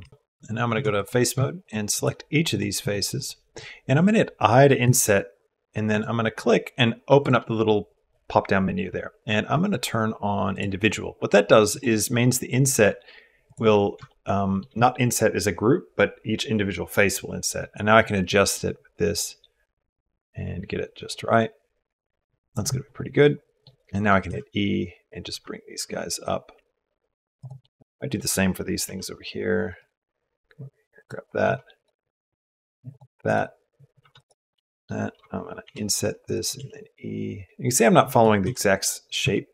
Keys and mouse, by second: 0.5 3, 0.7 click, 2.9 shift+click, 4.6 i, 10.3 click, 13.3 click, 13.9 shift+middle click, 18.0-19.3 drag, 23.2 click, 23.8 click, 24.1 e, 27.2 middle click, 27.5 middle click, 28.6 ctrl+r, 30.8 click, 31.2 ctrl+r, 33.1 click, 33.8 3, 34.0 middle click, 34.3 middle click, 35.4 i, 36.4 e.